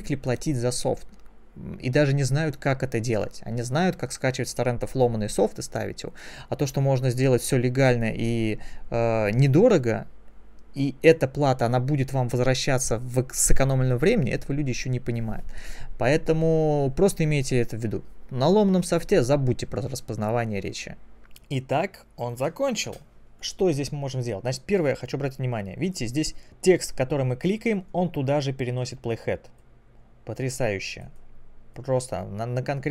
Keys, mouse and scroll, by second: 23.4 click, 29.7 click, 30.5 click, 31.7 click.